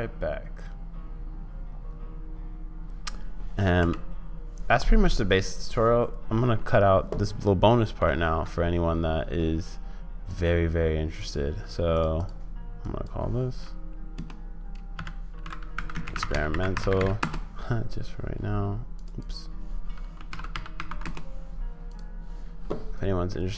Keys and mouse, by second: 3.8 space, 8.2 ctrl+s.